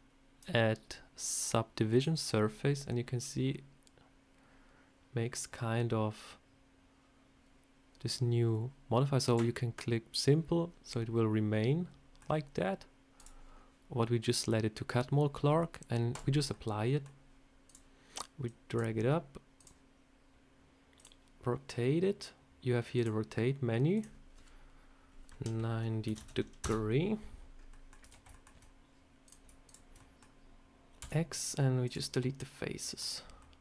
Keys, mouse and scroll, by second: 2.3 scroll up 1, 9.1 click, 10.8 middle click, 13.1 click, 13.4-13.8 scroll up 1, 16.0 click, 16.4 middle click, 17.6 click, 18.3 click, 19.5 click, 20.9 click, 22.8 click, 23.8 click, 27.4 scroll down 2, 27.6 middle click, 27.9 Tab, 28.2 shift+middle click, 29.1 click, 29.6 shift+click, 29.9 middle click, 30.9 x, 32.1 middle click, 33.3 middle click.